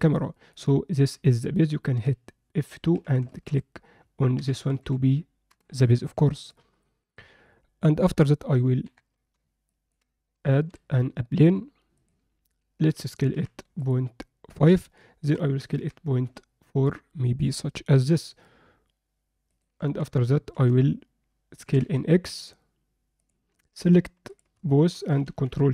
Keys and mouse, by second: 0.5-1.0 alt+middle drag, 2.0 F2, 6.5 alt+middle click, 8.8 KP_7, 9.7 ctrl+alt+middle click, 10.7 shift+a, 12.8 s, 15.2 s, 19.8 Tab, 20.5 z, 21.6 s, 23.5 click, 25.2 ctrl+shift+b.